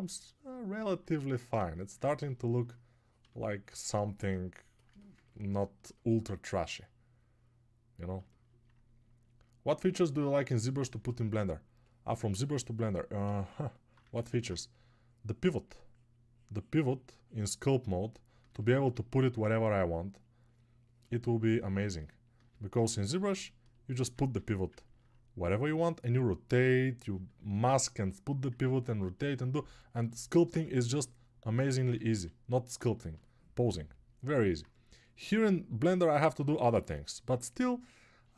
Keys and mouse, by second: 18.8-23.3 shift+drag, 18.8-23.3 shift+right drag, 23.3-24.7 alt+drag, 23.3-24.7 alt+right drag.